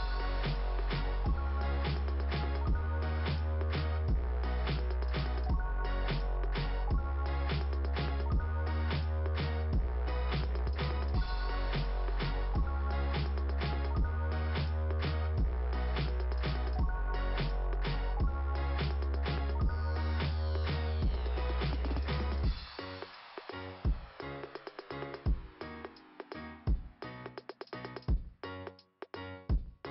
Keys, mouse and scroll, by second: 0.9 click, 2.9 click, 5.4 click, 6.5 click, 8.8 click, 9.2 click, 13.1 click, 14.7 click, 17.1 click, 17.7 click, 18.5 click, 19.5 click, 22.0 click, 22.3 click, 23.1 click, 24.3 click, 24.8-25.6 scroll up 1, 28.1-28.5 scroll down 3.